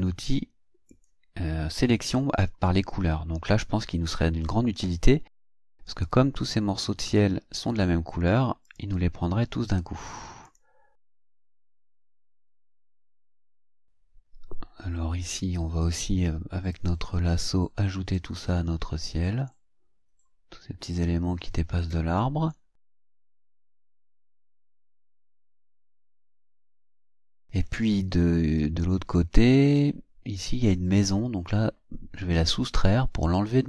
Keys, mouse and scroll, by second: 0.9 click, 1.9 click, 5.9 click, 7.0 click, 8.7 click, 10.5 click, 11.6 click, 12.2 click, 16.7 click, 18.1-22.0 drag, 23.0-24.9 drag, 25.3-26.6 drag, 28.6-30.0 drag, 33.3 click.